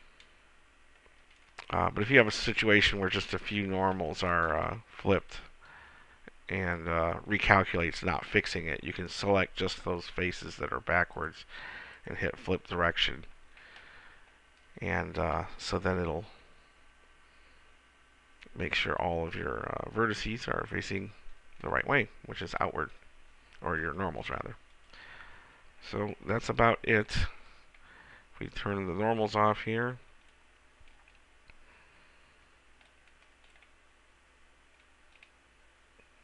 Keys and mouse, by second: 3.7 b, 4.8 a, 5.3 b, 6.6-8.7 drag, 11.2-13.9 middle drag, 14.1-17.4 middle drag, 26.6 KP_1, 35.0 middle click.